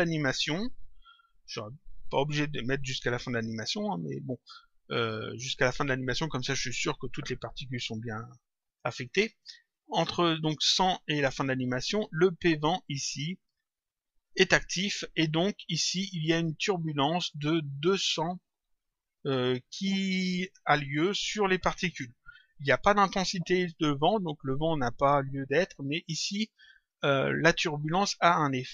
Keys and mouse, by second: 9.0 click, 12.3 click, 26.8 click.